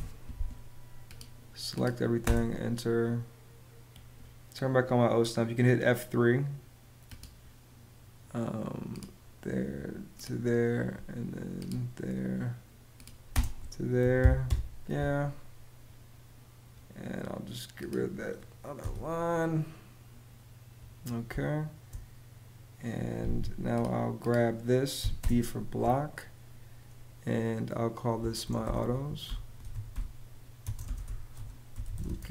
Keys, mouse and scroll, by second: 1.9 space, 13.0 space, 13.7 y, 14.2 Return, 14.8 Return, 18.5 BackSpace, 21.0 space, 24.7 b, 24.9 space, 28.1-32.2 typing.